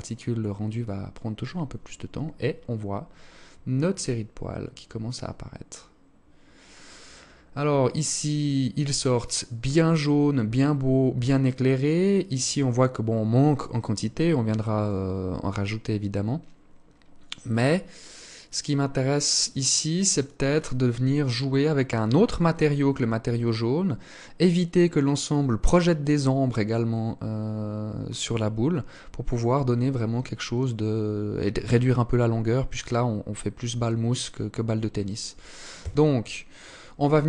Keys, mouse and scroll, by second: 34.9 Escape, 36.6 click.